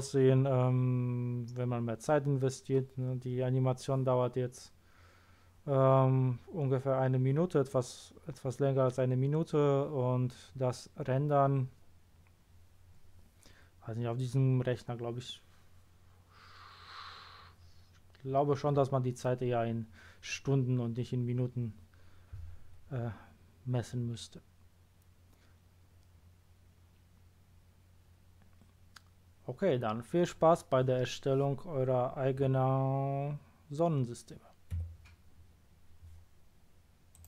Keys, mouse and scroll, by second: 34.7 Escape.